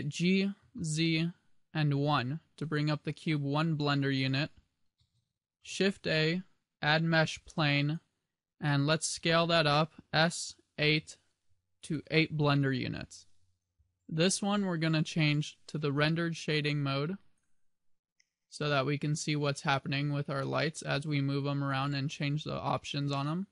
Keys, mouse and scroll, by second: 0.0 g, 2.8 click, 5.7 shift+a, 9.5 s, 12.0 click, 15.3 click, 18.3-20.7 scroll up 5.